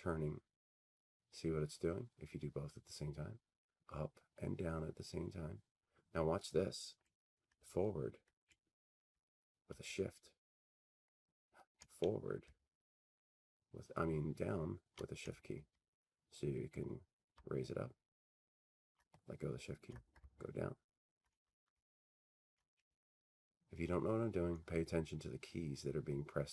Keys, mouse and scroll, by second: 9.7 Up, 9.7 Up, 10.7-11.5 scroll up 4, 12.5 scroll down 1, 13.0-16.3 scroll down 62, 16.3-17.5 scroll up 36, 20.2-21.8 scroll down 17, 21.8-22.9 scroll up 11, 22.9-23.2 scroll down 1, 23.5-24.2 scroll down 17, 24.7-25.5 Left.